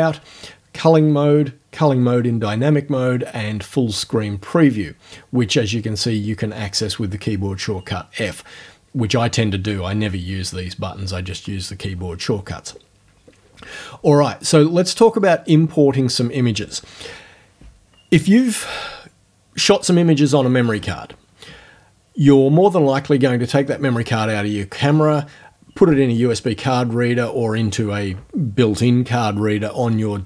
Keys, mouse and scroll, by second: 15.2 click.